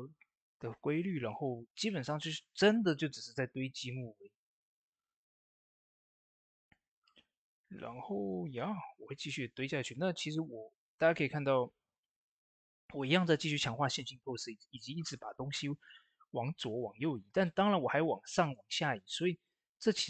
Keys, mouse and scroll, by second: 2.8 click, 2.9 click, 8.0 ctrl+s, 17.2 ctrl+s, 17.2-20.0 drag.